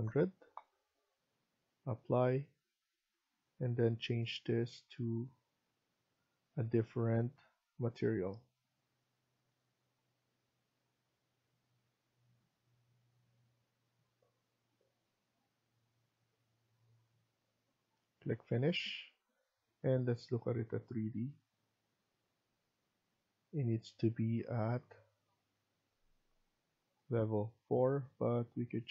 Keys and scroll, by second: 0.0-0.1 typing, 4.1-4.8 typing.